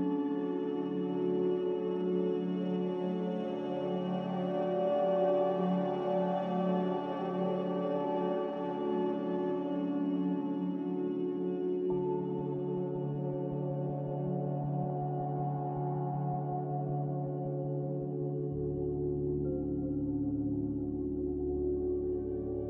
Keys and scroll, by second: 10.9 Delete, 17.3 ctrl+j, 20.6 z, 21.9 a.